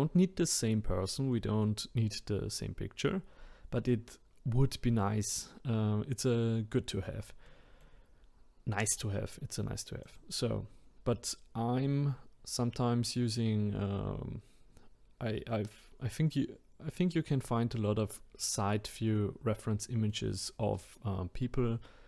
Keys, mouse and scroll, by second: 7.5-10.0 middle drag, 10.0 click, 19.2-22.0 middle drag.